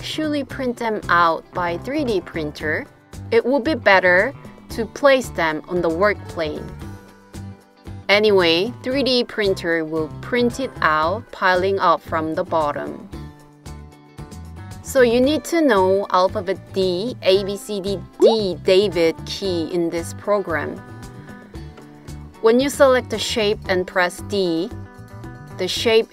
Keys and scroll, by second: 18.2 d, 19.6 d, 23.2 typing.